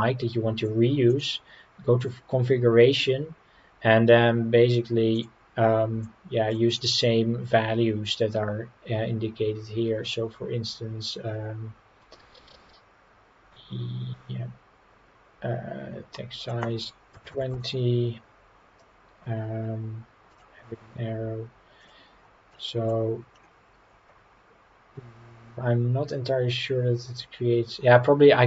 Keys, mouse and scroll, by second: 1.1 click, 1.7-4.1 scroll down 4, 5.1 click, 16.4-17.5 drag, 20.3-21.9 drag, 22.5-22.9 middle drag, 23.4 scroll down 2.